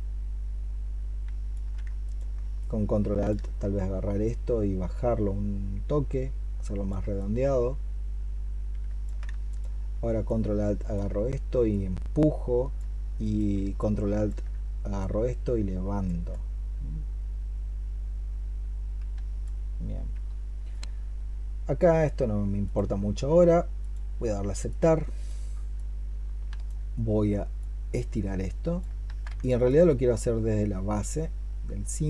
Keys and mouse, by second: 1.1 alt+c, 1.9 ctrl+click, 9.3 ctrl+click, 13.0 ctrl+click, 28.9 ctrl+z, 29.5 alt+click.